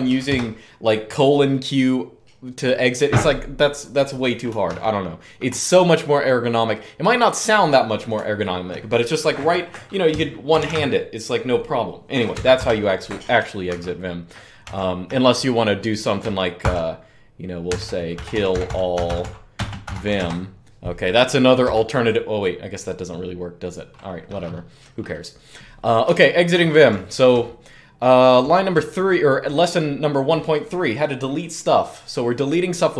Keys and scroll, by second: 0.0 typing, 4.4 ctrl+d, 10.0-10.9 typing, 12.1 Up, 12.3 Return, 13.4 ctrl+d, 13.4 typing, 14.4 ctrl+d, 16.1-20.4 typing, 25.8-29.2 typing.